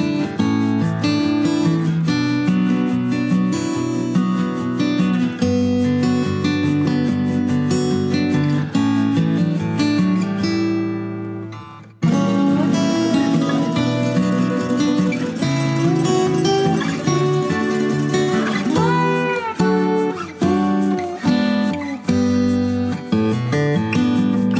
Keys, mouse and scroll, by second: 0.6-3.7 drag, 5.6 click, 6.6-7.4 middle drag, 8.8 click, 10.2 drag.